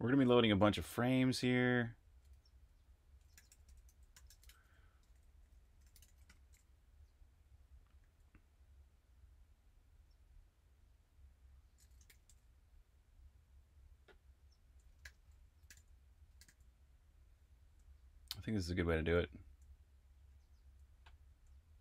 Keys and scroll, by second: 0.0-6.2 typing, 8.0 j, 11.8-12.7 typing, 15.0-21.8 typing.